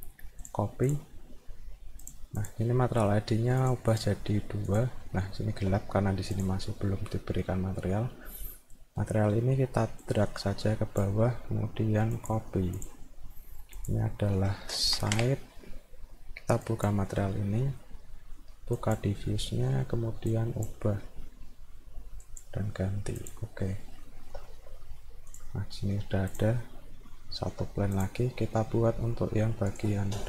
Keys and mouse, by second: 0.4 click, 0.9 click, 2.1 click, 2.4 click, 3.6 click, 3.9 click, 4.7 click, 5.4 alt+middle click, 6.3 click, 10.0 click, 12.1 click, 12.8 click, 13.8 click, 16.7 click, 18.8 click, 20.3 click, 22.2 click, 23.2 click, 24.0 alt+middle click, 25.3 click, 26.3 click, 26.6 alt+middle click, 28.0 click, 29.7 click.